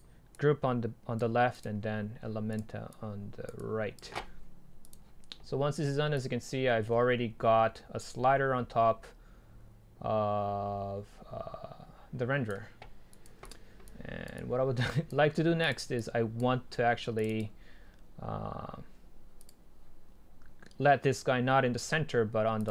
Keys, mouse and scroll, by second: 1.0-3.0 drag, 8.1-10.4 drag.